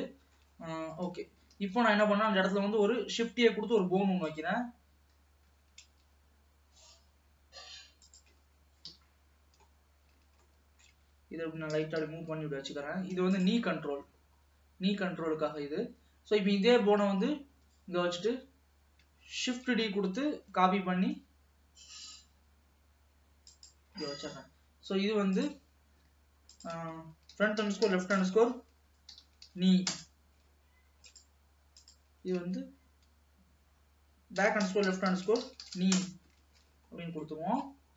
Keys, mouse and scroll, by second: 0.1 shift+middle click, 0.6-1.2 scroll up 1, 1.2 t, 1.3-1.9 scroll up 1, 1.9 ctrl+s, 3.5 shift+a, 4.3 click, 5.6 g, 9.1 KP_3, 9.7-10.5 scroll up 4, 10.5-11.8 shift+middle drag, 11.8 g, 16.0-19.0 scroll down 1, 19.5 shift+d, 24.2-24.8 scroll down 4, 24.8-25.4 scroll down 1, 25.4 click, 26.7-29.7 drag, 29.7 e, 31.2 click, 31.9-34.9 drag, 35.8 e, 36.8 ctrl+s, 37.2 scroll down 1, 37.4 middle click.